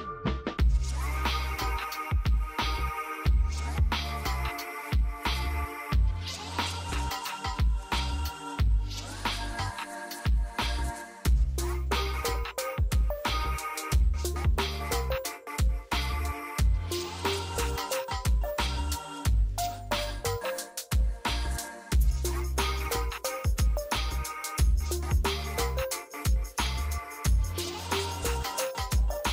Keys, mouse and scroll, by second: 1.2 F2, 2.0-3.7 drag, 3.7 F2, 4.4-6.2 drag, 6.2-6.8 scroll down 1, 6.8 F2, 7.2-15.6 drag, 15.6 space, 16.3 F2, 16.6-23.9 drag, 23.9 scroll down 1, 24.7 click, 25.3 scroll down 1, 27.1-29.3 drag.